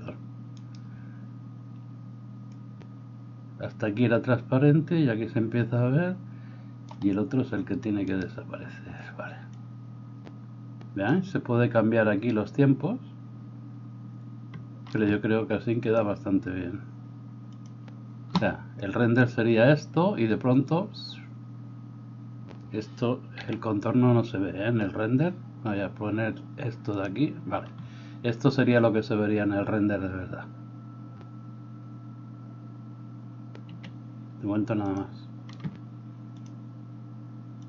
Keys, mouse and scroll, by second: 23.4 a, 33.7 Escape, 33.7-35.0 middle drag.